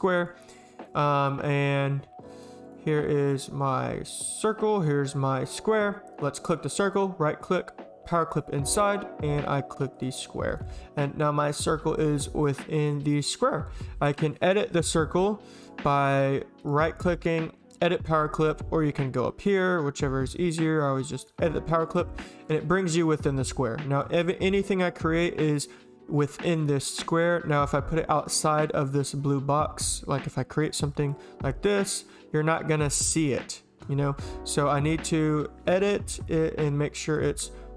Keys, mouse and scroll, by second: 0.2 click, 0.4 click, 2.4 click, 2.7 click, 2.9 click, 4.6 click, 5.4 click, 6.4 click, 6.7 right click, 8.3 click, 9.9 click, 10.5 click, 15.6 click, 16.6 right click, 21.2 click, 21.7 click, 30.6 click, 30.9 click, 31.4 click, 32.7 click, 32.8 h, 34.6 click, 35.3 right click, 36.2 click, 36.6 click.